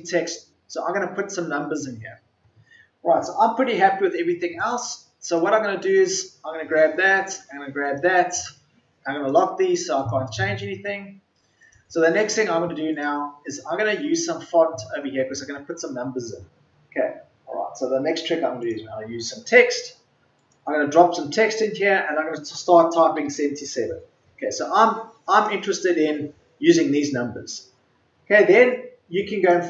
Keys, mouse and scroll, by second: 23.1 KP_7.